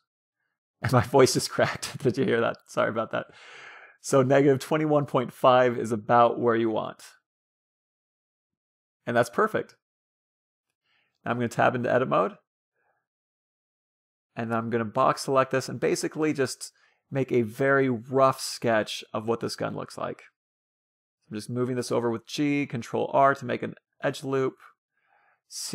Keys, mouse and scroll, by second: 1.4-4.3 drag, 5.3-7.0 drag, 11.5 Tab, 12.8 a, 12.9 a, 14.0 b, 15.6 g, 18.7 a, 19.3 b, 20.4-21.9 drag, 22.2 a, 23.3 ctrl+r.